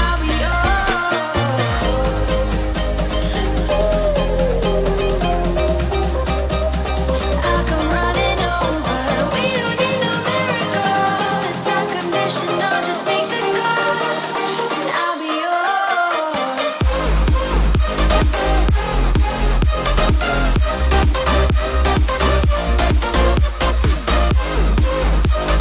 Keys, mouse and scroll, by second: 0.1 scroll up 1, 1.3 p, 1.6 click, 3.2-3.5 typing, 5.2 click, 6.0-6.7 typing, 7.1 Return, 7.5-9.0 middle drag, 9.0 click, 10.1-11.5 middle drag, 11.8 scroll down 1, 12.6 shift+middle click, 12.9 scroll up 1, 13.6 click, 14.2-15.5 middle drag, 15.5 click, 15.7 space, 16.0 scroll down 1, 16.5 middle click, 17.2 scroll down 1, 18.2 middle click, 19.0 click, 21.7 scroll up 1, 21.9 shift+middle click, 23.7-24.0 scroll up 1, 24.0 right click, 24.7 click, 25.3 right click.